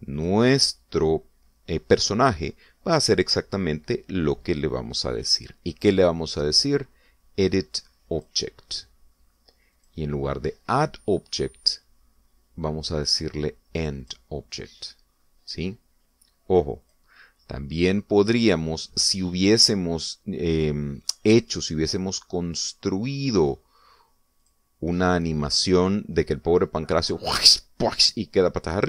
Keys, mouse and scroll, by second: 1.1 click, 9.1 click, 10.7 click, 15.0 click, 17.8 click, 25.4 click.